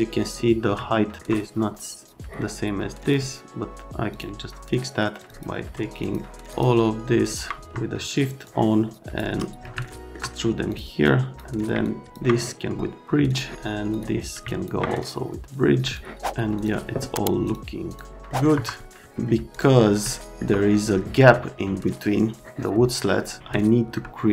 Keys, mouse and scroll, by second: 0.8 alt+middle click, 3.0 click, 4.1 click, 5.1 click, 6.0 ctrl+click, 6.5 ctrl+click, 7.2 click, 8.4 shift+click, 9.8 alt+middle click, 10.7 click, 11.0 click, 11.8 ctrl+click, 13.3 click, 13.9 click, 14.5 ctrl+click, 15.8 click, 16.5 click, 17.4 click, 17.9 click, 18.3 middle click, 18.5 F3, 19.5 click, 20.1 alt+middle click, 20.6 middle click, 21.2 middle click, 23.5 alt+middle click, 24.2 middle click.